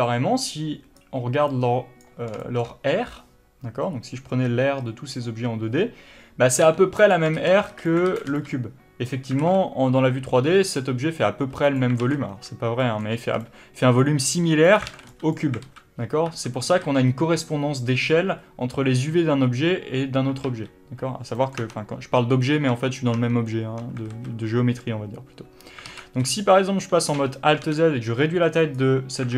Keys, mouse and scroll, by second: 2.7-7.4 shift+middle drag, 7.4 click, 7.7 ctrl+z, 8.4 alt+a, 13.1-15.0 shift+middle drag, 13.6 b, 15.0 click, 15.2 alt+a, 15.4 b, 15.9 alt+a, 16.6 1, 17.1 a, 20.7 alt+a, 21.7-29.0 middle drag, 21.9 Tab, 24.4 alt+a, 29.0 click.